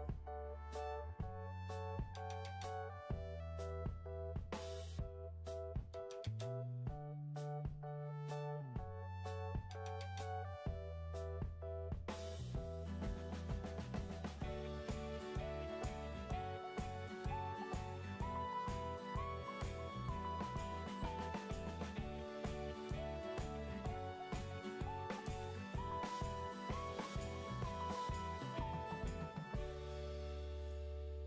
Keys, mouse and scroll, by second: 25.6 typing, 27.2 typing, 27.5 Return.